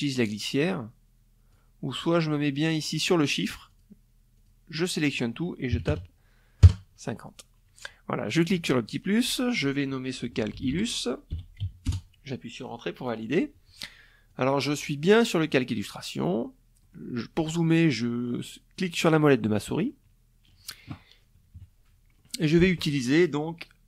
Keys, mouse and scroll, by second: 2.1 click, 2.9 click, 4.3 KP_5, 4.4 KP_0, 5.2 KP_Enter, 7.4 click, 8.8 i, 9.1 l, 10.2 s, 10.4 Return, 12.8 click, 13.6 click, 14.5 click, 15.4 click, 18.0 middle click, 18.4 middle click, 20.1 KP_Subtract, 20.8 middle click.